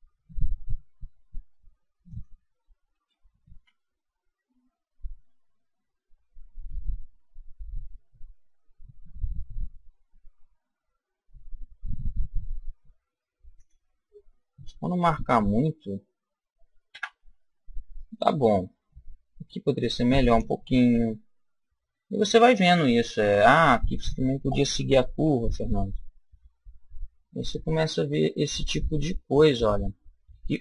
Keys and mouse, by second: 2.2 click, 2.9 s, 13.7 click, 14.0 middle click, 15.6-18.0 middle drag, 16.9 Tab, 19.7 middle click, 20.9 KP_1, 22.3-24.3 middle drag, 25.3 Tab.